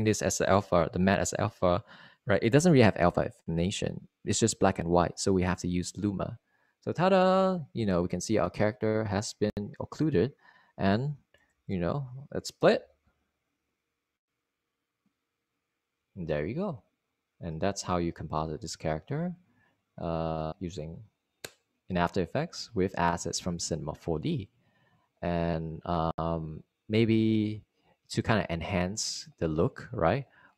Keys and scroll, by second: 15.1 0.